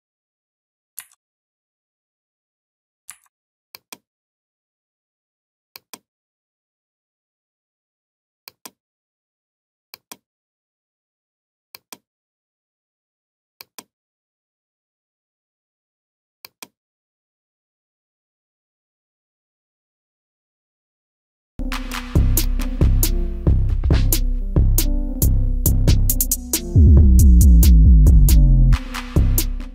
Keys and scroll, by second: 2.9 Down.